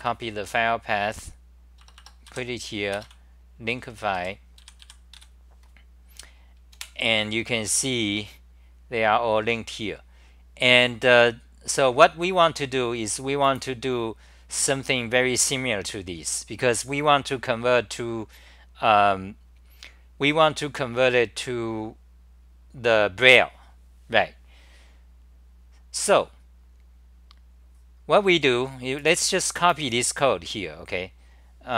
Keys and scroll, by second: 1.8 Return, 2.3 Return, 2.3 k, 3.7-5.2 typing, 6.9 super+r, 31.6-31.7 typing.